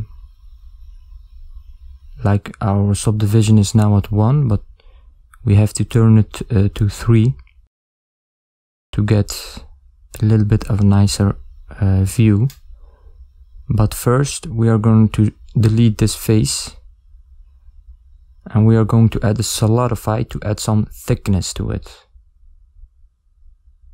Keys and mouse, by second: 1.0 shift+z, 1.7 ctrl+middle click, 6.7 middle click, 8.5 ctrl+middle click, 13.4 middle click, 13.4 click, 13.8 x, 16.7 click, 17.6 click, 18.7 click.